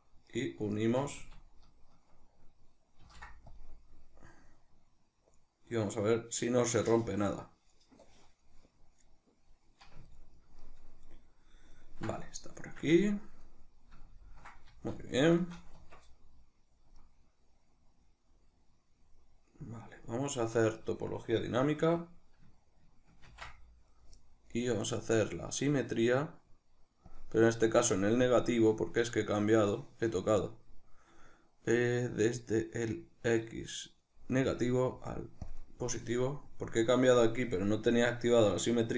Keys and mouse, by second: 0.3 right click, 0.8 shift+right click, 3.0 ctrl+shift+b, 10.1-27.2 ctrl+middle drag, 14.7 z, 15.8 Tab, 26.7 ctrl+d, 27.2-38.9 drag.